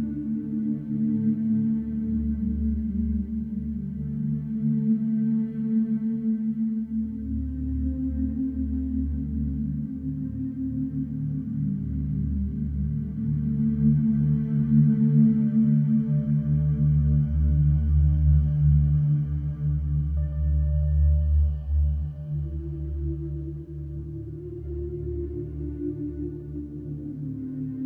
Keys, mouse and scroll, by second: 2.3 shift+a, 4.0 alt+middle drag, 4.4-5.1 shift+middle drag, 5.1 s, 7.2 g, 9.4 alt+middle drag, 10.0 g, 16.6-17.9 middle drag, 19.0 shift+middle drag, 19.3-19.7 scroll up 5, 20.3 s, 21.6-22.3 middle drag, 22.3 scroll down 1, 22.5-23.2 middle drag, 23.2 Tab, 23.3 click, 24.1 click, 25.0 click.